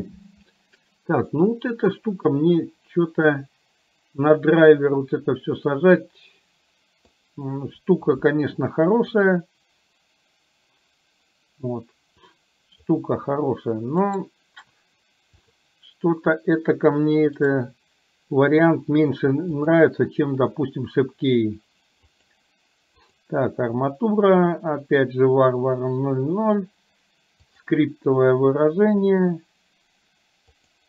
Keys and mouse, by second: 1.4-7.3 middle drag, 9.3-12.9 drag, 14.2 right click, 15.5 click, 17.5-30.8 right drag.